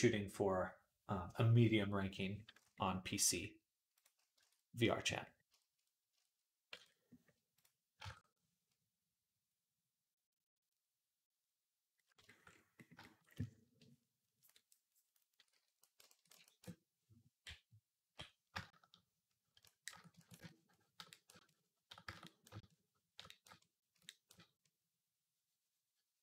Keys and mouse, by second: 3.8-18.6 middle drag, 4.2 Tab, 6.6 Tab, 7.8 ctrl+Tab, 15.3 d, 17.2 [, 17.7 [, 17.8 [, 17.9 [, 18.6-26.2 drag.